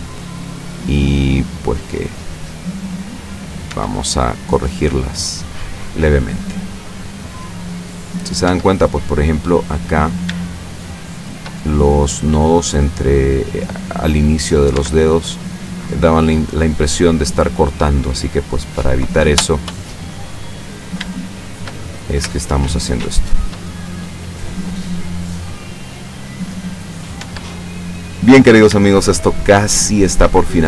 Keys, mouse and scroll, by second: 0.8-3.8 shift+drag, 3.7 shift+Tab, 4.5-5.3 shift+middle drag, 6.2-7.4 shift+middle drag, 7.4-7.9 shift+scroll up 1, 8.8 shift+Tab, 8.8 shift+scroll up 1, 9.1 shift+middle click, 10.1 shift+right click, 10.7 shift+right click, 11.3 shift+right click, 11.6-12.9 shift+middle drag, 13.3-14.8 drag, 14.8 Tab, 15.2-16.5 middle drag, 16.5-16.9 scroll down 1, 18.0-19.6 middle drag, 21.2-21.8 shift+middle drag, 22.0-22.5 shift+scroll up 1, 22.5-23.2 shift+middle drag, 23.3 shift+middle click, 27.2 Tab, 28.5 shift+right click, 29.0 shift+right click, 30.0 shift+right click, 30.5-30.6 shift+middle drag.